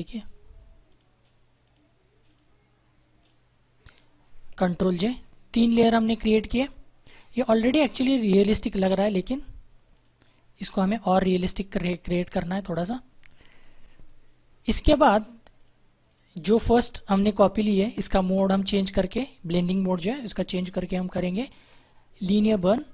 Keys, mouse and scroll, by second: 0.8 alt+click, 5.0 ctrl+j, 8.9 click, 15.5 click, 18.6 click, 22.8 click.